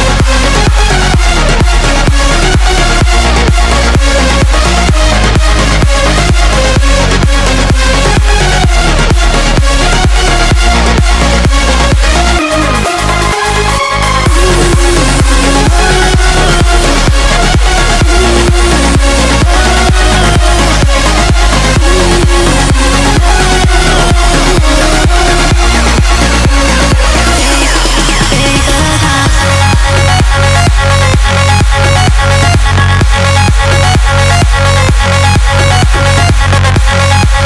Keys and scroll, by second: 9.7 ctrl+l.